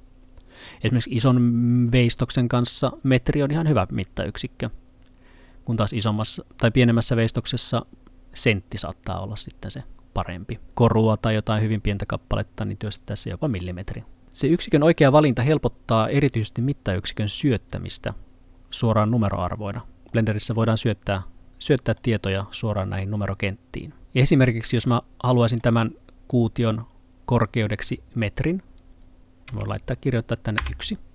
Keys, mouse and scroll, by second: 14.2 click, 20.1 middle click, 24.8 middle click, 28.8 click, 29.5 1, 30.6 Return.